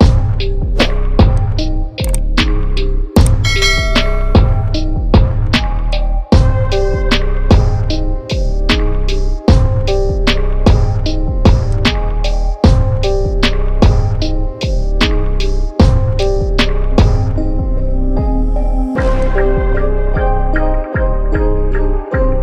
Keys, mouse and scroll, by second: 1.3 click, 5.9 click, 7.9 right click, 10.7 click, 16.2 click, 19.2 click.